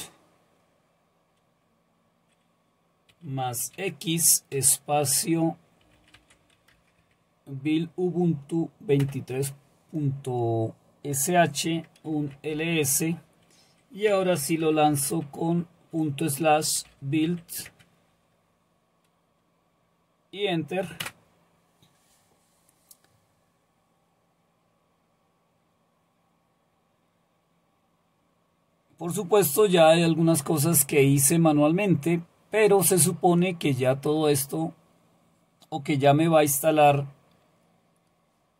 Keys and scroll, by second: 3.1-4.6 typing, 5.6-6.5 typing, 7.0 Tab, 9.0 Return, 12.2-12.5 typing, 12.6 Return, 14.4-15.1 typing, 16.6-17.7 typing, 21.0 Return.